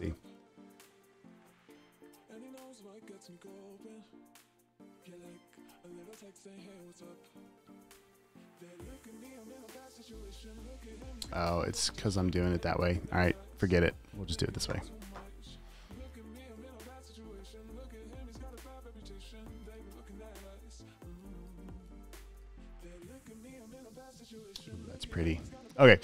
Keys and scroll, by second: 7.0 super+s, 22.4 space, 24.0-26.0 typing.